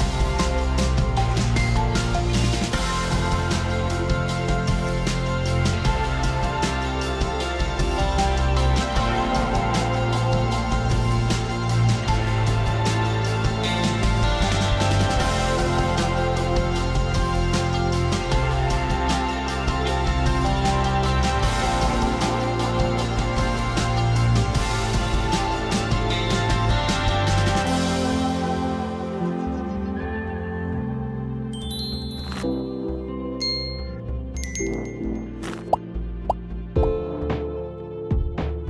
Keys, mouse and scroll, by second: 0.8 click, 1.6 click, 3.2 click, 4.6 click, 6.3 click, 7.5 click, 8.0 click, 9.1-9.7 ], 10.6 click, 11.3 click, 13.0 [, 13.7 click, 13.7 [, 14.4 ], 14.7 ], 15.1 click, 17.2 ], 18.3 click, 21.1 click, 23.8 click, 25.2 click, 25.4-26.7 scroll, 26.7-27.2 scroll, 28.2 click, 30.9 click, 35.8 click, 36.6 click, 37.4 [, 37.7-38.6 [.